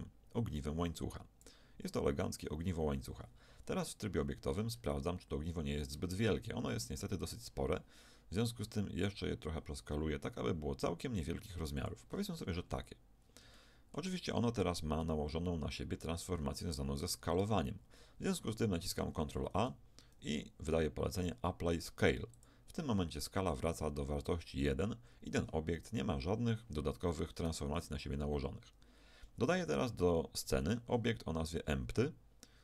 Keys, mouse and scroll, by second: 3.1 Tab, 3.7-6.3 middle drag, 6.3-7.0 scroll up 1, 7.0-9.1 middle drag, 9.1 s, 12.1-13.5 drag, 13.2-14.0 typing, 13.5-15.3 middle drag, 15.9 n, 19.3 ctrl+a, 27.7 n, 30.7 shift+a.